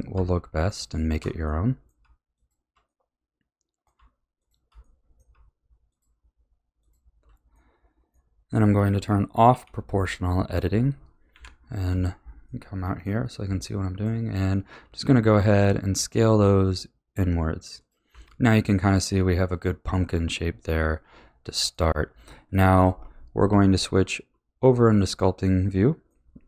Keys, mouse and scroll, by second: 0.7 alt+shift+click, 1.4-2.3 middle drag, 2.3 alt+shift+click, 2.9-4.4 middle drag, 4.4 alt+shift+click, 4.8-5.9 middle drag, 5.9 alt+shift+click, 6.8 alt+shift+click, 7.5-9.5 middle drag, 9.5 o, 11.3 KP_1, 12.4-14.6 middle drag, 14.6 s, 18.1 a, 18.4-21.3 middle drag, 23.5 Tab, 24.3 b, 24.9-26.4 middle drag.